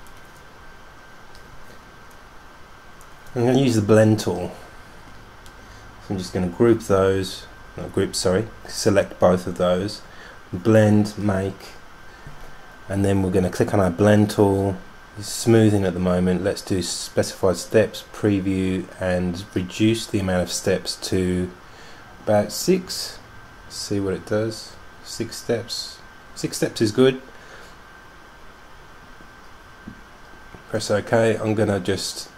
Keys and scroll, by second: 22.9 6.